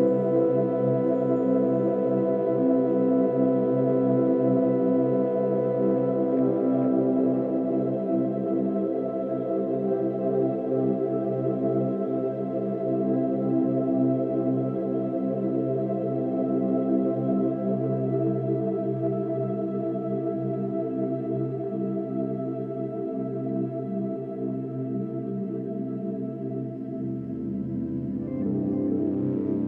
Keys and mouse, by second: 5.0-7.8 shift+drag, 8.5-9.3 typing, 10.0 Return, 12.3 0, 14.5 s, 15.3 click, 17.8 click, 18.4 typing, 19.5 click, 20.8 click, 21.8 alt+click, 22.5-23.4 typing, 22.9 alt+click, 23.3 click, 24.2 alt+click, 25.3 click, 27.1 click.